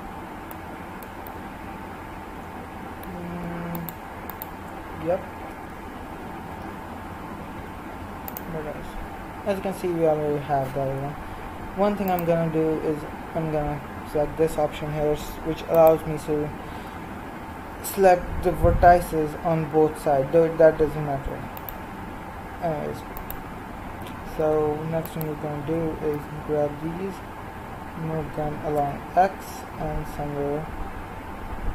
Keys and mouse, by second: 3.7-6.5 right drag, 6.5 KP_1, 7.5 x, 11.0-15.7 middle drag, 15.7-16.8 right drag, 16.8 g, 26.1 g, 28.8 middle click, 29.6-31.7 middle drag.